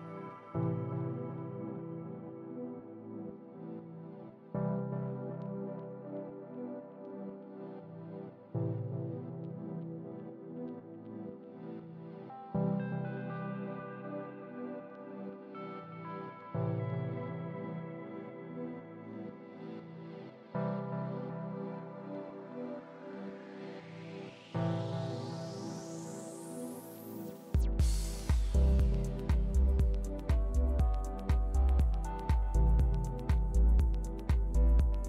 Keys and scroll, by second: 9.8 super+d, 10.9 shift+super+d.